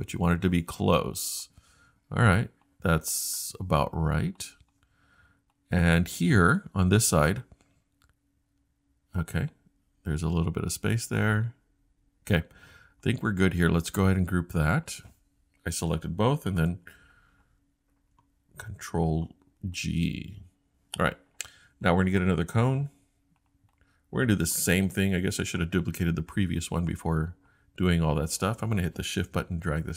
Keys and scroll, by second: 16.6 super+g.